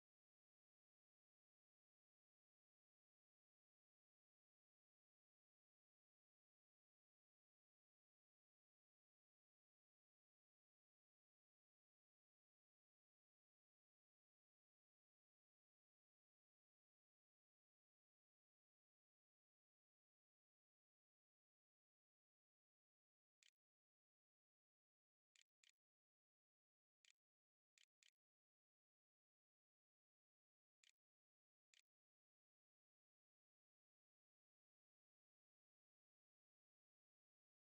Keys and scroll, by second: 21.7 Tab, 21.7-26.4 typing, 27.6-30.3 typing, 31.3 ctrl+a, 31.3 ctrl+s, 32.1 a.